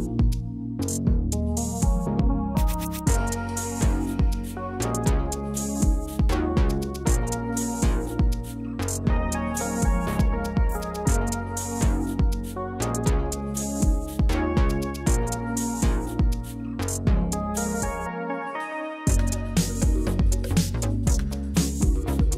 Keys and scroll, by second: 5.1-5.9 typing, 7.0 1, 7.3 0, 10.2-11.1 typing, 17.6 0, 21.2 BackSpace.